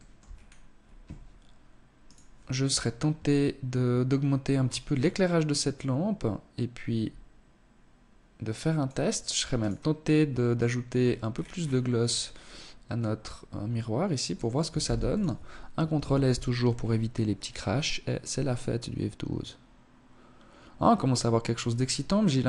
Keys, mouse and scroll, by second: 0.9 right click, 3.5-3.8 scroll up 1, 3.8 scroll down 2, 4.6 click, 8.5 right click, 9.8-11.6 scroll down 14, 11.8 click, 13.7 ctrl+s.